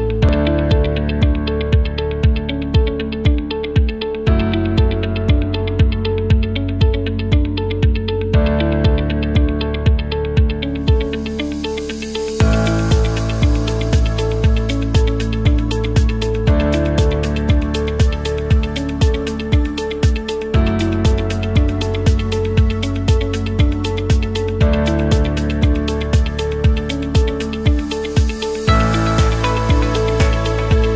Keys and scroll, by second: 7.1 f, 8.2-15.1 typing, 16.2-18.4 typing, 30.7 m.